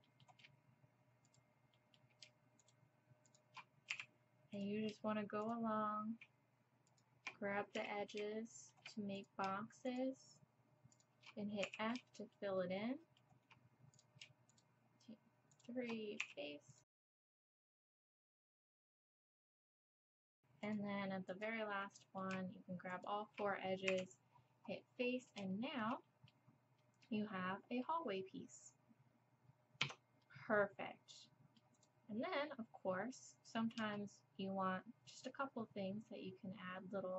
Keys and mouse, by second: 3.9 f, 7.8 f, 11.7 f, 16.2-19.8 typing, 23.9 f, 29.8 Tab, 31.8 click.